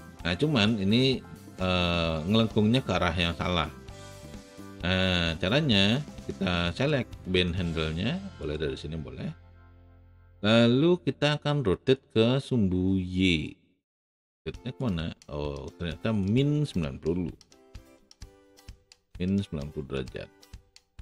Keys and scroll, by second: 17.9 KP_9, 17.9 KP_0, 18.2 Return.